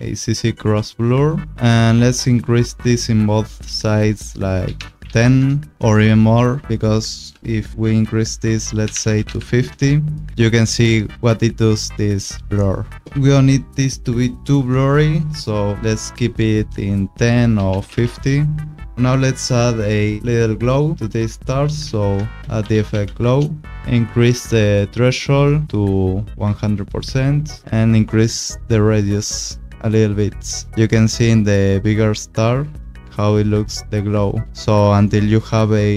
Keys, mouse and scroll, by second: 1.8 click, 4.6 1, 4.7 0, 5.0 Tab, 5.0 1, 5.2 0, 5.3 Return, 6.5 click, 8.8 5, 8.9 0, 9.1 Tab, 9.2 5, 9.3 0, 9.7 Return, 17.5 1, 17.7 5, 17.8 Tab, 18.0 1, 18.1 Return, 18.1 5, 18.9 click, 22.1 ctrl+space, 22.6 g, 22.7 l, 22.7 o, 22.9 w, 23.2 Return, 25.2 click, 27.9 click, 32.5 scroll, 32.8 click, 33.1 click, 33.6 scroll.